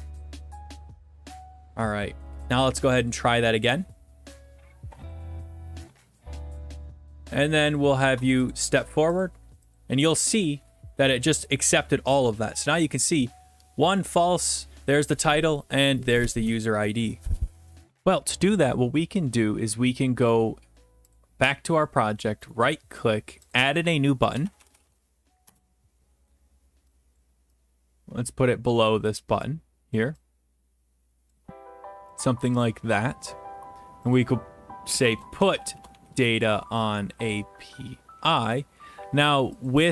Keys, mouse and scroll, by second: 0.0 click, 0.9 click, 3.2 click, 5.1 click, 6.1 click, 7.0-8.2 middle drag, 8.5-10.8 drag, 12.2 click, 21.1 click, 22.5 right click, 23.5 click, 24.4-24.9 typing, 25.4 Return, 27.2-28.4 drag, 30.0 click, 31.3 click, 33.1 click, 35.1-39.3 typing, 39.7-39.9 drag.